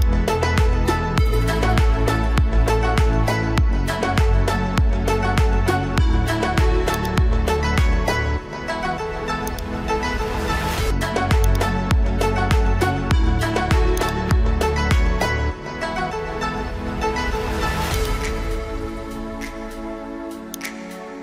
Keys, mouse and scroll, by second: 7.0 shift+click, 9.5 click, 11.4-13.1 ctrl+drag.